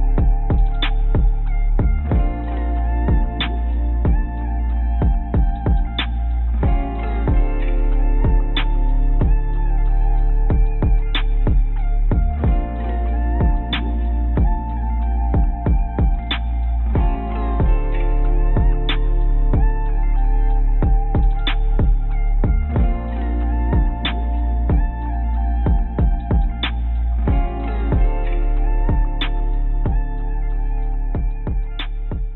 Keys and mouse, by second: 1.0-1.3 y, 2.2 y, 2.9 click, 5.6 click, 9.0 shift+click, 9.5 shift+click, 12.4 g, 19.3-20.4 shift+drag, 20.8 ctrl+click, 22.6 g.